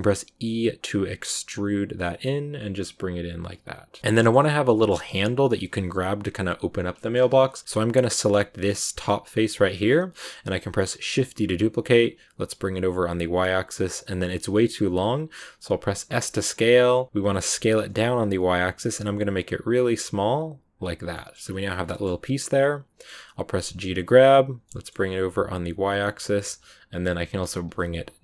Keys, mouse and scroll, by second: 0.3 e, 4.0 shift+middle click, 4.8 shift+scroll up 1, 6.9 shift+middle click, 7.2-8.5 scroll up 1, 8.9 right click, 9.3 scroll down 2, 9.8 middle click, 10.1 scroll down 2, 11.0 shift+d, 21.0 middle click, 21.3 scroll up 2, 21.8 middle click, 22.0-22.5 scroll up 1, 22.5-23.7 middle drag, 23.7 g.